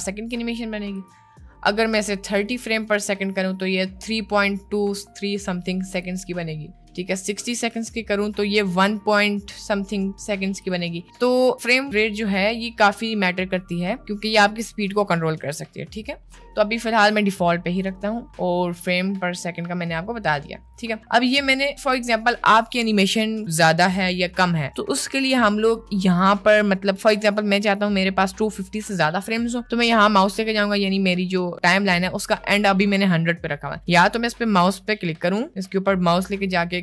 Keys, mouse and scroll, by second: 1.0-2.7 drag, 5.9-7.5 drag, 10.6-16.4 drag, 18.7 middle click, 20.8 middle click, 21.7 middle click, 24.4 middle click, 25.0 middle click, 28.2 middle click, 34.7-36.8 drag.